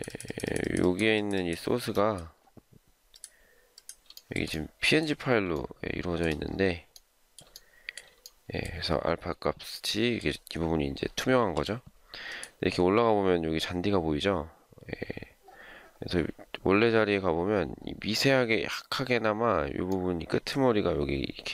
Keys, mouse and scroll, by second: 4.1 shift+middle click, 5.6 shift+middle click, 7.4 shift+scroll down 1, 7.5 shift+middle click, 11.4 m.